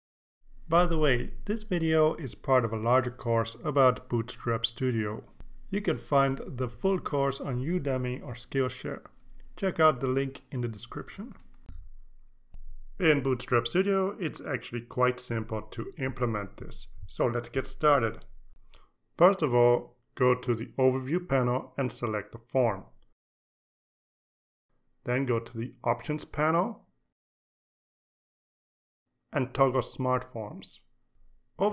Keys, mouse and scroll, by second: 24.1-26.1 drag, 27.5 click, 30.8 click.